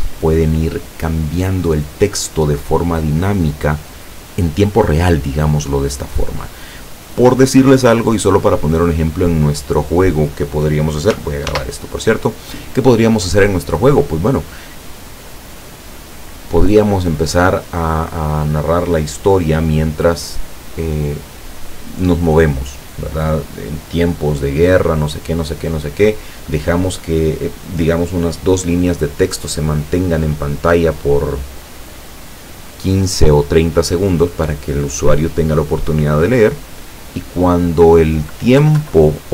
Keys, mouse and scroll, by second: 11.5 ctrl+s, 12.0 ctrl+click, 38.6 Left.